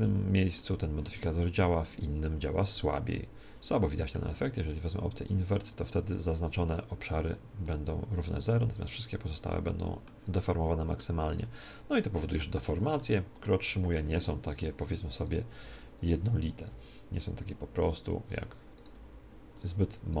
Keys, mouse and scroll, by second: 6.4 click, 7.6-9.4 middle drag, 10.3-14.6 middle drag, 13.6 Tab, 14.0 Tab, 14.4-18.3 right drag, 14.8 Tab, 15.6 g, 16.1 click, 16.3 middle click, 16.6 middle click, 16.6 g, 17.1 middle click, 18.3-20.2 drag, 18.7-20.2 right drag, 18.9 g.